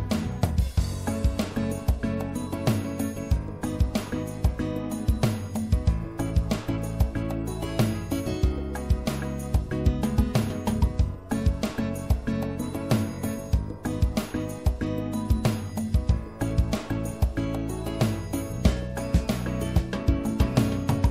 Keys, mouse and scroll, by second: 3.0-4.7 drag, 4.7-5.7 middle drag, 6.9-9.3 middle drag, 9.3-15.5 drag, 13.3 right click, 20.0 ctrl+z.